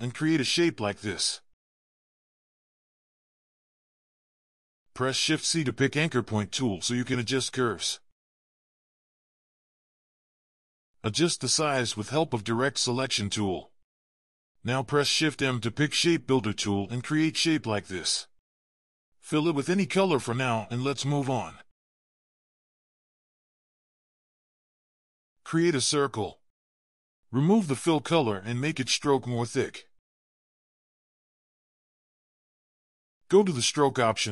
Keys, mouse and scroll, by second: 1.8 typing, 4.7 double click, 7.3 c, 9.3-10.3 typing, 10.4 double click, 13.7 v, 16.3 typing, 17.4 double click, 18.0 v, 18.8 double click, 19.9 double click, 22.9 double click, 23.9 double click, 24.7-25.0 ctrl+scroll down 2, 25.1 double click, 25.5-26.0 typing, 27.9 typing, 31.9 double click.